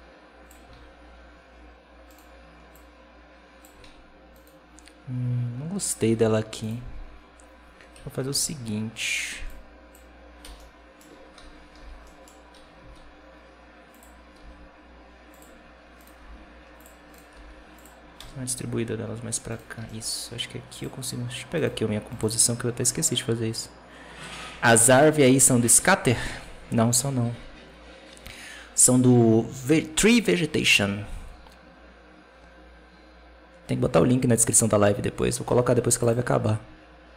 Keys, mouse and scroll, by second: 0.6 alt+a, 2.0 right click, 2.6-3.7 drag, 3.7 alt+a, 4.3-7.8 right drag, 7.8 KP_7, 8.2 alt+a, 9.2 b, 10.5 middle click, 11.2 KP_7, 11.6 b, 13.1 alt+d, 14.2 r, 15.4-15.9 scroll up 2, 15.9 right click, 16.1 g, 17.0 right click, 17.2 g, 18.0 KP_0, 19.4 right click, 19.7 g, 21.5-22.7 right drag, 22.7-23.3 scroll down 3, 23.3-23.8 scroll down 1, 34.7-35.3 scroll up 3, 35.3-35.9 scroll down 4, 35.9-37.1 drag.